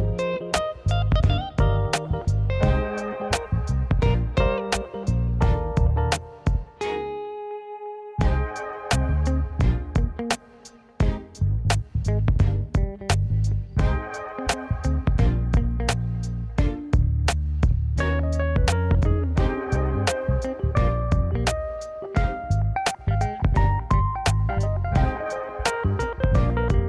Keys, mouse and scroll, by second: 0.2 g, 2.3 click, 2.7-3.8 middle drag, 3.8 click, 4.2-5.4 drag, 6.1-9.1 drag, 9.9-11.2 middle drag, 13.5-15.1 drag, 16.2 click, 17.0-19.2 middle drag, 19.7 middle click, 20.8 right click, 22.4 Tab, 23.0-23.3 right drag, 23.3-24.5 middle drag, 25.4 Tab, 26.5 alt+click.